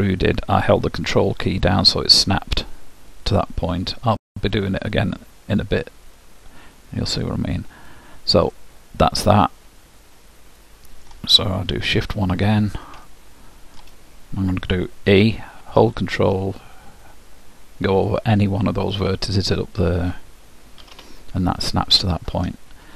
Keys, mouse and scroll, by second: 3.5 s, 8.5-10.2 middle drag, 10.3 middle click, 13.0-15.1 middle drag, 15.1 e, 20.8 z, 21.6-22.9 middle drag.